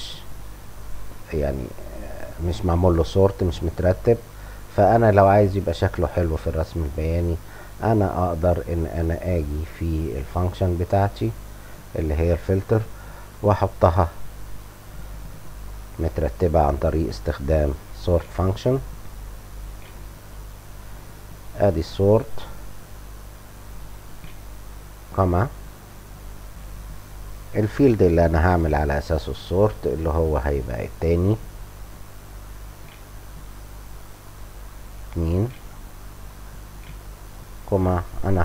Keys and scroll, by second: 16.5-18.1 typing, 19.5-20.7 typing, 24.1 ,, 30.8-32.7 typing, 35.4-37.0 typing, 36.0 Down.